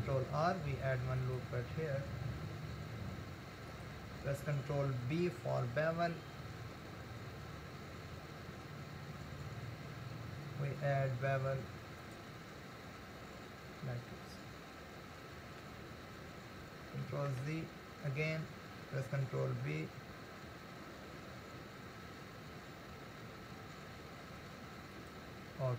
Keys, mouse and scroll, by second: 0.3 ctrl+r, 5.7 ctrl+b, 14.1-17.4 middle drag, 17.4 ctrl+z, 19.3 ctrl+b.